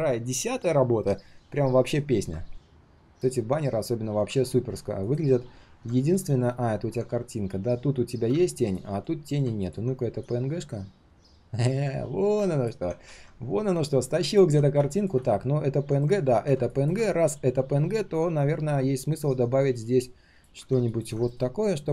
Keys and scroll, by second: 5.9 ctrl+shift+3, 6.4 ctrl+shift+3, 8.9 ctrl+shift+3, 9.2 ctrl+shift+3, 13.0 ctrl+z, 14.4 ctrl+z, 16.1 ctrl+z, 21.3 alt+l.